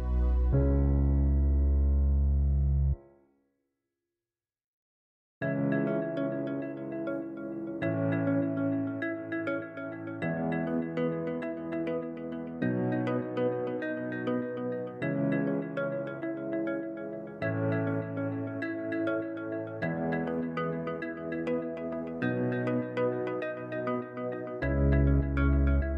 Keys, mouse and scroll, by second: 5.4 ctrl+alt+KP_0, 7.8-10.7 drag, 14.0-17.4 middle drag, 17.4 KP_7, 19.6 click, 20.8 s, 24.6 KP_1.